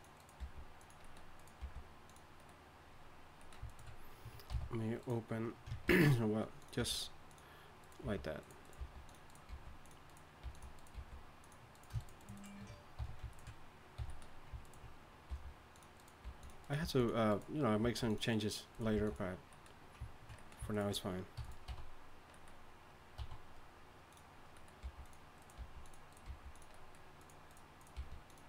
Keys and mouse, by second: 0.4 g, 1.6 g, 4.5 c, 5.9 ctrl+b, 6.8 g, 8.0-10.9 typing, 13.0 f, 14.0 f, 15.3 g, 16.2 g, 16.8 g, 17.8 g, 18.9 g, 21.4 e, 21.7 d, 23.2 s, 24.8 g, 25.4 click, 25.6 g, 26.3 g, 26.8 click, 27.9 g.